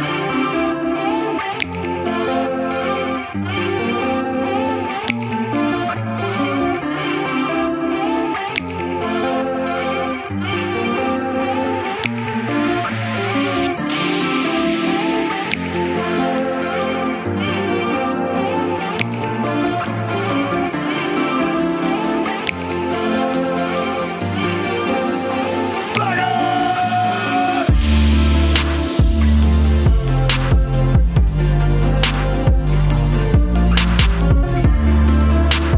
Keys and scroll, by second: 11.2 a, 23.1-25.1 typing, 25.4 Return, 31.8 Return, 31.8 typing.